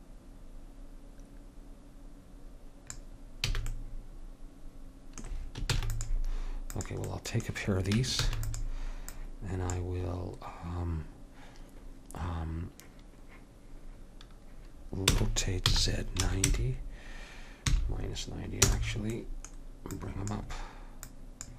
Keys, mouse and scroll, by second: 3.7 a, 5.9 ctrl+s, 7.3-8.4 middle drag, 8.3 shift+d, 15.2 r, 20.1-21.5 drag.